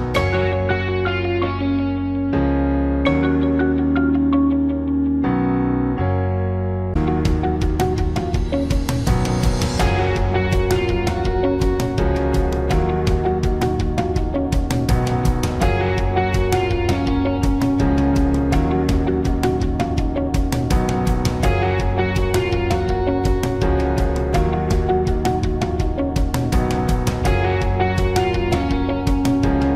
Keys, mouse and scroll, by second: 5.9 Return, 12.1-17.1 alt+drag, 21.0-24.2 drag.